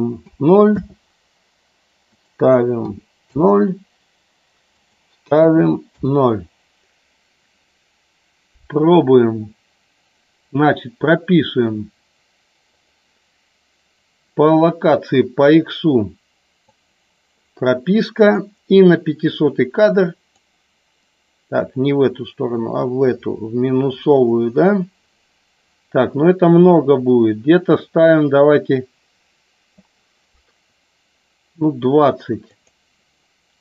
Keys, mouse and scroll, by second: 2.1-3.5 drag, 4.7-6.4 drag, 12.7 click, 16.7 click, 18.2 click, 20.4-29.8 drag, 32.4 click.